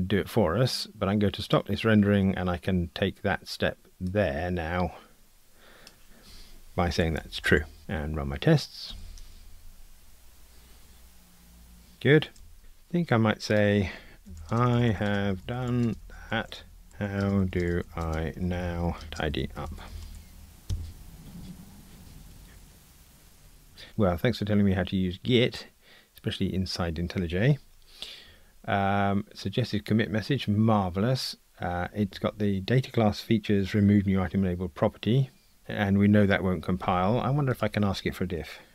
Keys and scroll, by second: 8.9 ctrl+r.